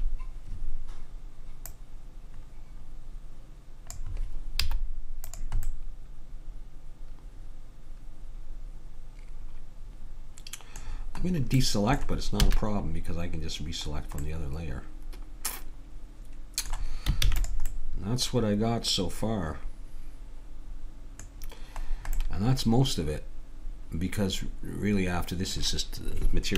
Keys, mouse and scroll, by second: 1.7-3.4 drag, 4.6 z, 5.7 middle click, 5.9-6.9 middle drag, 12.4 a, 13.9 middle click, 17.2 ctrl+s, 22.8-24.0 middle drag.